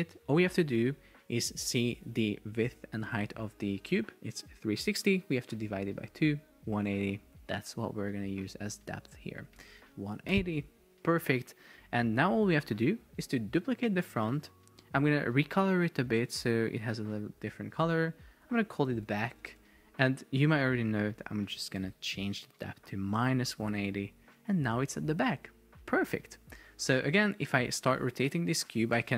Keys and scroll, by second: 10.4 Return, 14.4 super+d, 19.0 shift+b, 19.5 Return, 22.0 Left, 23.2 Return.